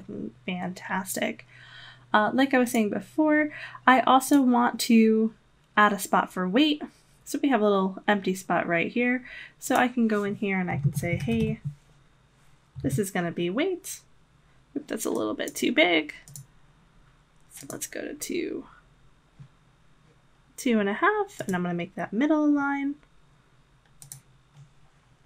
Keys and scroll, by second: 10.6-11.9 typing.